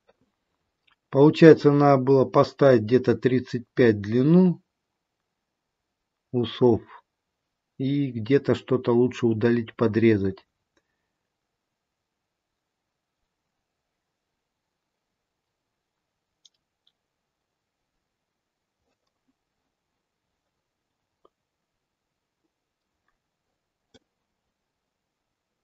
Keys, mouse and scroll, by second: 22.2 middle click, 22.2-24.0 scroll down 2, 24.0 middle click.